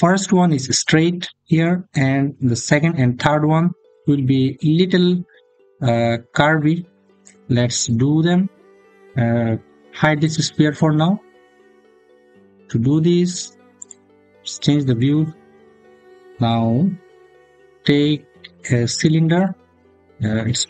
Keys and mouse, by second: 10.0 click, 16.6 shift+a.